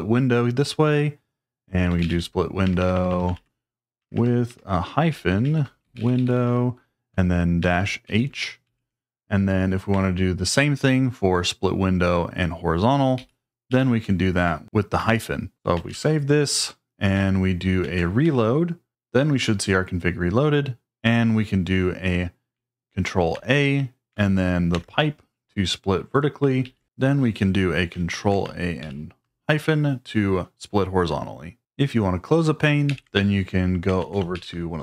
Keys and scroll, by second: 1.6-8.0 typing, 8.6 ctrl+e, 13.1 ctrl+g, 13.7 ctrl+g, 14.4 Escape, 15.3-16.2 typing, 17.8 ctrl+a, 18.2 r, 23.3 ctrl+a, 24.7 shift+\, 26.6 ctrl+d, 28.1 ctrl+a, 28.8 -, 32.9 ctrl+l, 34.0 ctrl+a.